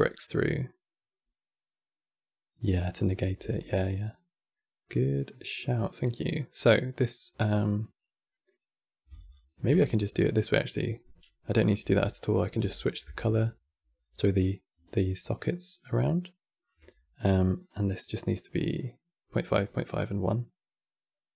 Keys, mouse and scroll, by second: 2.6 click, 3.1 shift+d, 5.0 middle click, 5.5 scroll up 4, 6.1-7.3 drag, 7.3-8.8 middle drag, 8.8 ctrl+shift+click, 9.0 ctrl+shift+click, 10.1 click, 11.4 click, 11.5 x, 11.8 middle click, 12.1 scroll up 5, 12.5 ctrl+shift+click, 14.6-17.3 shift+middle drag, 17.3 click.